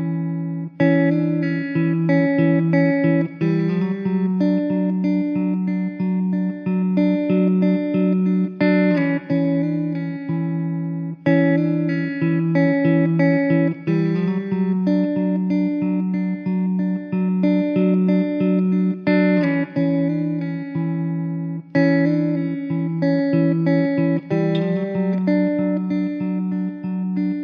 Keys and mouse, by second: 3.1-4.3 typing, 15.9 middle click, 21.2 alt+w, 21.9 alt+middle click, 23.9 alt+w, 25.8 middle click.